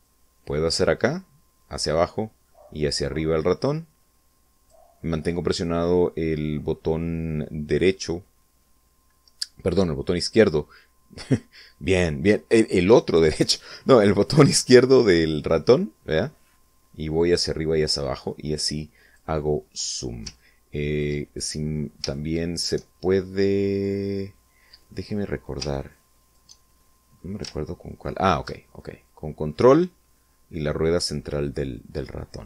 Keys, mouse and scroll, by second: 15.5-19.1 drag, 20.2 ctrl+click, 21.9 shift+click, 25.5 ctrl+shift+click, 27.4-28.4 ctrl+shift+middle drag, 28.7-32.2 ctrl+middle drag, 32.3-32.4 ctrl+middle drag.